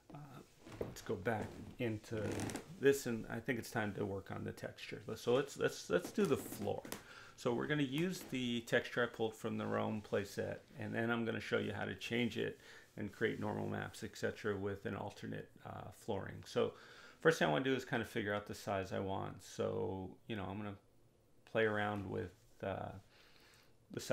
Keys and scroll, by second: 9.5 2, 10.0 0, 12.2 4, 12.5 0, 12.9 Return, 20.3 2, 20.9 Return.